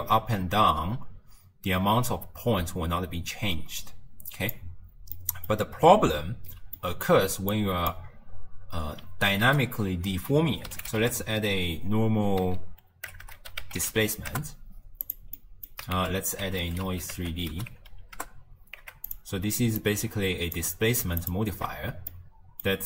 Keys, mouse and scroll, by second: 0.0-3.0 drag, 5.2-7.6 middle drag, 7.6 click, 9.4 ctrl+a, 13.3 BackSpace, 15.4 middle click, 16.0 ctrl+a, 19.8 click, 21.2 alt+shift+click, 22.1-22.8 middle drag.